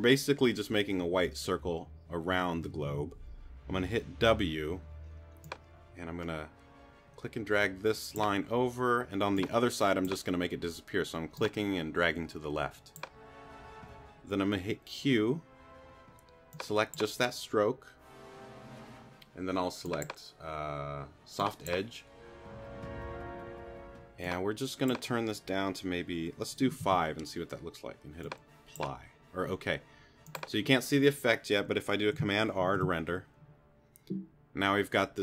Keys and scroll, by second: 4.2 w, 14.6 q, 26.8 5, 32.7 super+r.